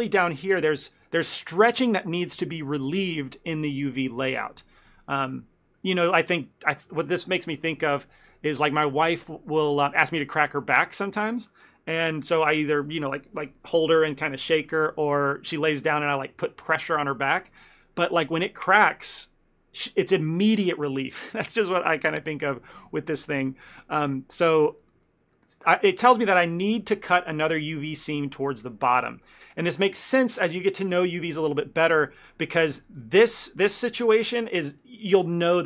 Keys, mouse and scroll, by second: 1.1-2.9 scroll up 3, 6.1 ctrl+middle click, 23.7 shift+middle click, 24.2 ctrl+middle click, 24.8 middle click, 25.0 shift+middle click, 25.4 ctrl+middle click, 29.3 ctrl+middle click, 32.2 shift+middle click, 32.6 ctrl+middle click, 32.9 middle click, 34.4 middle click, 34.5 shift+middle click.